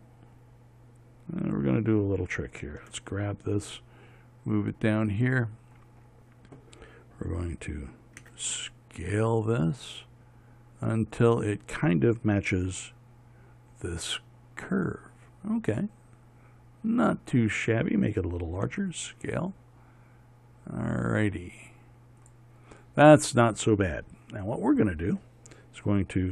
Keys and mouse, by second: 0.1 s, 3.3 g, 8.7 s, 13.1 g, 19.2 s.